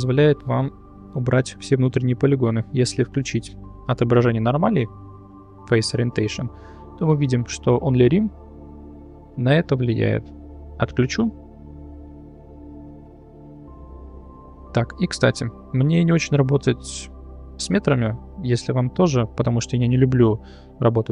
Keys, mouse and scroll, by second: 0.9 middle click, 4.6-6.3 drag, 6.6-7.2 middle drag, 8.6 click, 9.1 click, 9.6 middle click, 12.1-13.1 drag, 14.2 shift+middle drag, 15.1 middle click.